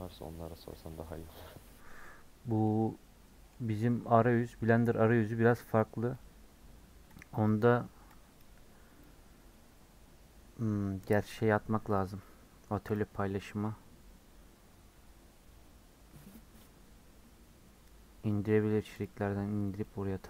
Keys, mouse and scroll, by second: 2.0 scroll down 4, 2.4 scroll up 1, 2.6-5.2 middle drag, 5.2 scroll down 2.